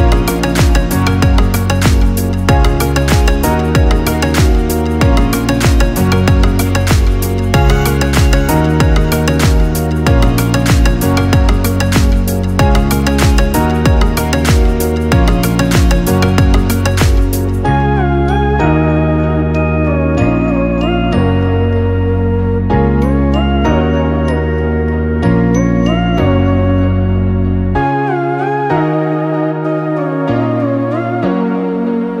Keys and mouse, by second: 2.1-3.5 middle drag, 3.5-9.0 drag, 9.6-22.2 middle drag, 22.2 ctrl+z, 25.1 p, 28.0 Tab, 29.8 ctrl+l, 31.0 p.